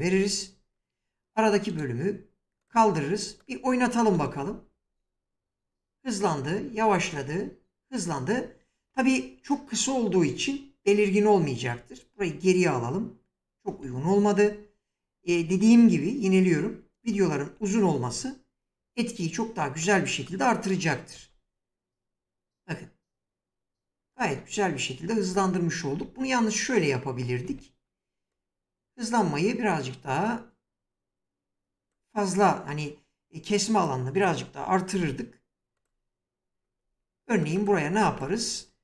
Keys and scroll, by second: 3.7 space, 8.4 space, 11.4 ctrl+z, 16.6 ctrl+z, 20.7 space, 23.7 space, 24.9 ctrl+z, 28.4 ctrl+z, 34.5 s.